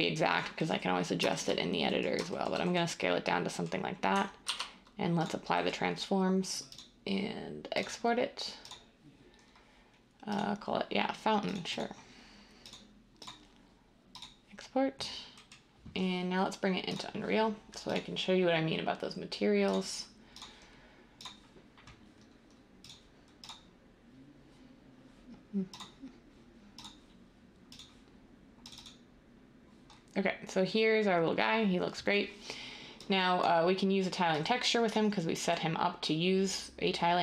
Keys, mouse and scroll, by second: 4.4 ctrl+a.